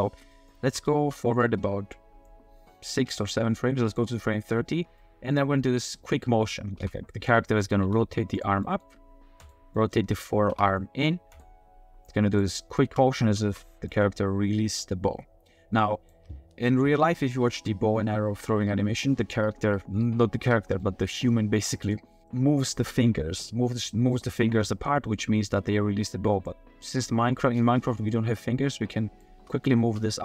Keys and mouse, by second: 0.4 click, 0.6 space, 0.9 space, 2.3-4.0 drag, 5.0 click, 6.8 r, 7.8 r, 8.6 click, 9.7 drag, 10.5 r, 12.1 click, 12.6 drag, 12.9 space, 13.4 space, 13.9-16.1 drag, 20.5 middle click, 20.6 click, 26.5-29.2 drag, 29.3 space, 29.8 space.